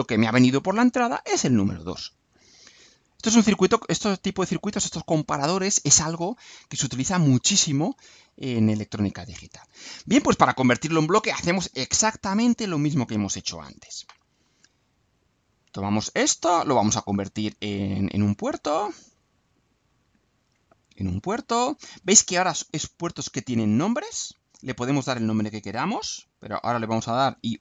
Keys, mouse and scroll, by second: 6.5 click, 7.7 scroll up 2, 8.4-10.1 right drag, 16.7 click, 17.9 click, 18.8 click, 19.9 click, 20.9 click, 21.8 click.